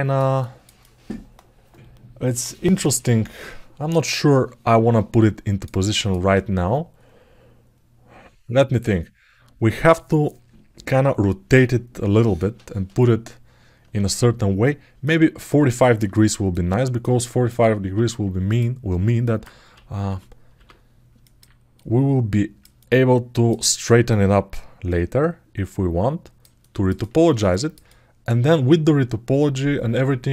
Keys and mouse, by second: 0.2 alt+shift+middle click, 0.5-5.4 alt+middle drag, 5.6 alt+shift+middle click, 14.8 alt+middle click, 16.3 alt+middle click, 17.0 alt+shift+middle click, 18.3 click, 19.0 alt+middle click, 21.0 alt+middle click, 21.6 click, 22.6 alt+middle click, 23.9-26.1 drag, 26.1 right click, 26.3 ctrl+alt+middle click, 26.8 ctrl+alt+middle click, 27.3 alt+shift+middle click, 27.6 alt+middle click, 27.8 alt+right click, 27.9-30.1 alt+middle drag.